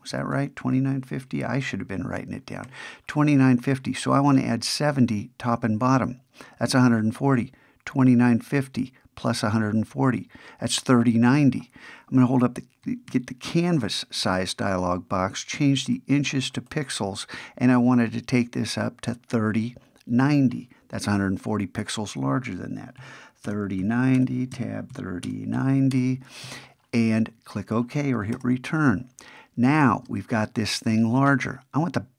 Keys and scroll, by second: 0.1 alt+super+i, 13.1 alt+super+c.